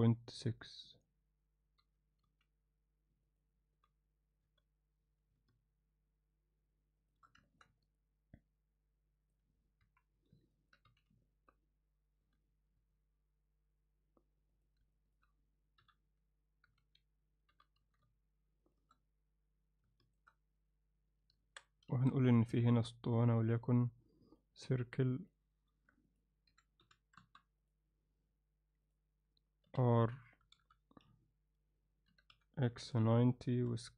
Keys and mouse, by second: 1.8 g, 3.8 g, 7.5 ctrl+middle click, 7.8-9.4 alt+middle drag, 9.8 KP_1, 10.6 ctrl+middle click, 10.9 z, 11.3 ctrl+middle click, 12.3 g, 15.0 ctrl+middle click, 15.8 h, 16.8 ctrl+z, 17.5 g, 20.1 shift+right click, 21.4 Tab, 21.9 shift+a, 26.1-27.4 drag, 28.9 click, 29.7 r, 32.1 r, 33.6 s.